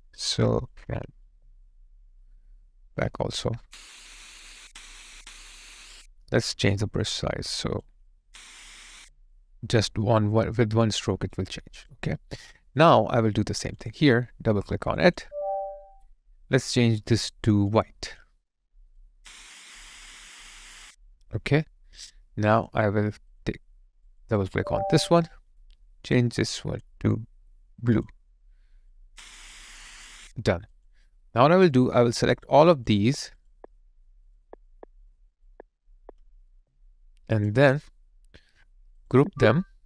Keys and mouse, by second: 1.2 alt+click, 6.7 ctrl+click, 9.0 alt+right click, 9.3 alt+click, 11.1 alt+right click, 11.6 alt+click, 15.1 double click, 21.3 alt+click, 24.4 double click, 32.1 double click, 32.3 shift+click, 36.5 alt+right click, 36.9 alt+click.